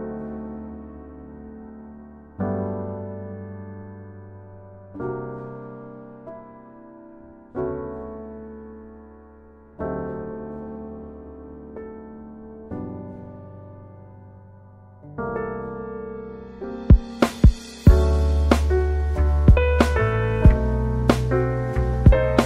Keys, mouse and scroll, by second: 0.5 click, 4.5 click, 12.2 click, 20.5 z, 22.3 space.